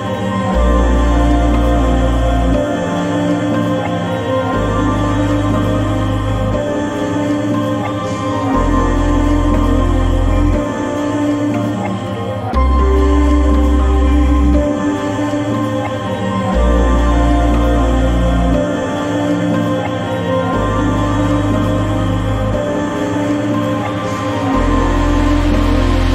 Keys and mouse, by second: 0.2 click, 4.9 click, 8.1-9.7 middle drag, 11.0 Delete, 13.2 click, 14.6 click, 16.0 click, 20.6 n, 21.3-23.1 drag, 24.9 n.